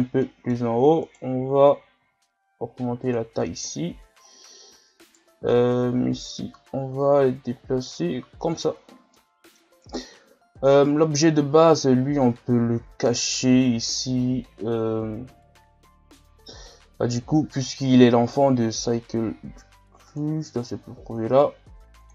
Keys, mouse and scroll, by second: 0.2 middle click, 1.1 right click, 1.6 scroll down 3, 2.0 s, 3.7 KP_1, 4.3 scroll up 2, 5.1 right click, 6.1-8.8 drag, 8.8 scroll down 3, 9.1-9.8 middle drag, 9.8 right click, 20.1-20.8 drag, 20.8-22.0 scroll down 2, 22.0-22.1 drag.